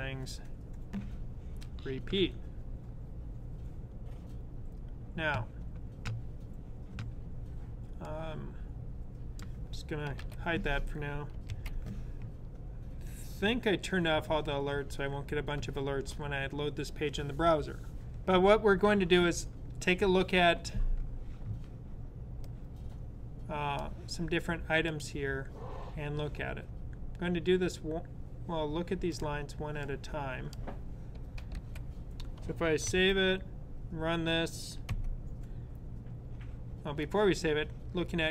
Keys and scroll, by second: 10.0 super+/, 11.3 super+s, 31.3 super+/, 32.6 super+s.